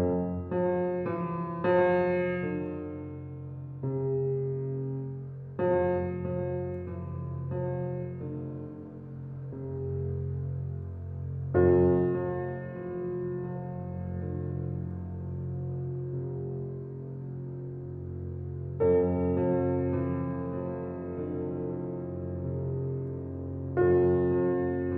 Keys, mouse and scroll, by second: 1.0 click, 2.2 click, 3.5 click, 13.3-19.0 drag, 20.3 shift+click, 21.2 shift+click, 22.9-24.9 drag.